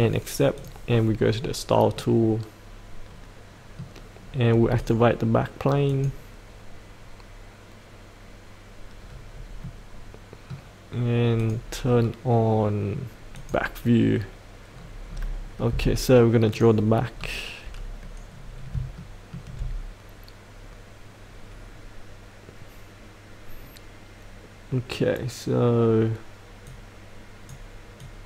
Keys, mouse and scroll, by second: 1.9 middle click, 4.8-5.8 drag, 9.3-9.6 scroll up 1, 9.6-10.9 middle drag, 11.4 click, 11.9-13.3 scroll down 1, 13.3 click, 14.7-15.1 scroll down 1, 16.5 click, 17.1 scroll down 1, 18.3-18.7 scroll up 1, 19.0 shift+middle click, 26.7-28.2 drag.